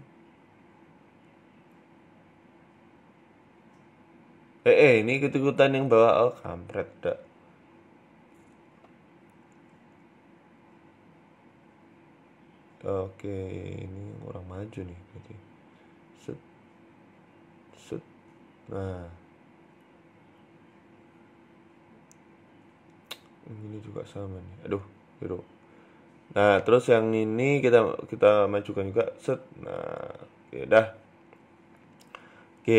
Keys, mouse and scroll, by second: 0.4 r, 1.2 s, 2.9 Tab, 3.1 scroll down 3, 3.4 scroll up 4, 3.5 Tab, 4.9 ctrl+z, 5.1 ctrl+z, 5.3 ctrl+z, 5.9 ctrl+z, 6.5 click, 8.0 r, 9.7 right click, 9.9 alt+shift+right click, 10.4 right click, 11.5 middle click, 12.6 middle click, 13.1 click, 13.5 middle click, 15.3 g, 16.2 click, 17.0 g, 17.8 Tab, 17.9 middle click, 18.4 Tab, 18.5 middle click, 19.0 middle click, 19.7 middle click, 20.3 right click, 21.2 right click, 21.7 middle click, 22.5 middle click, 23.1 right click, 24.0 right click, 24.5 ctrl+z, 24.9 right click, 25.5 scroll down 3, 25.5 Tab, 25.7 middle click, 26.2 Tab, 26.5 middle click, 27.3 click, 27.8 middle click, 28.6 g, 29.4 Tab, 29.5 middle click, 29.9-30.7 scroll down 5, 30.1 middle click, 30.6 middle click, 31.0 KP_1, 31.4-32.4 scroll up 3, 31.8 KP_3, 32.6 right click.